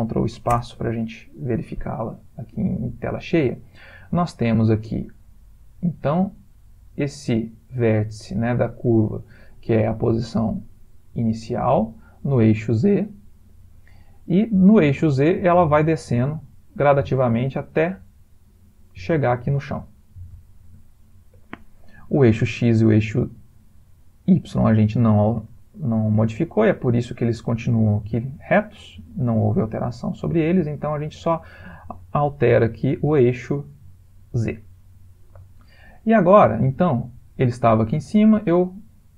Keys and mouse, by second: 21.0 ctrl+space, 25.6 middle click, 26.1 ctrl+middle click, 26.7 middle click, 26.9 middle click, 29.3 middle click, 29.9 ctrl+middle click, 30.7 middle click, 32.3 middle click, 33.4 middle click, 36.4 click.